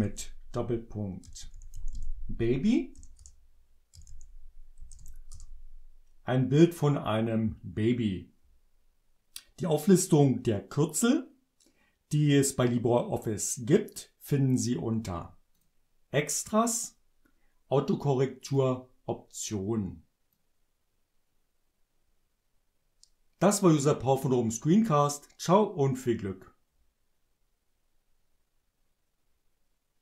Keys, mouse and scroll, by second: 1.0-4.9 typing, 5.3 shift+Return, 15.5 click, 18.4 click, 20.4-30.0 drag.